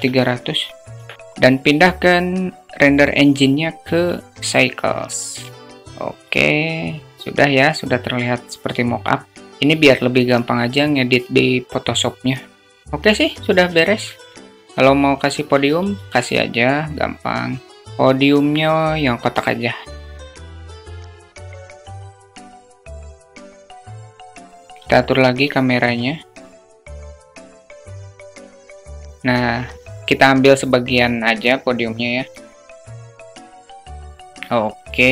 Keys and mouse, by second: 0.2 KP_0, 2.4-3.6 drag, 4.4 click, 5.1-5.5 alt+shift+middle drag, 10.4 click, 11.7 click, 12.1 right click, 13.0 q, 13.8 alt+shift+middle click, 16.6 drag, 17.3 click, 20.2 s, 20.8 click, 21.7 click, 22.2 click, 22.8 s, 23.5 click, 24.0 q, 24.4 alt+shift+middle click, 25.8-26.6 alt+middle drag, 26.7 alt+shift+middle click, 28.5 alt+shift+middle click, 31.6-33.9 drag, 34.8 alt+shift+middle drag.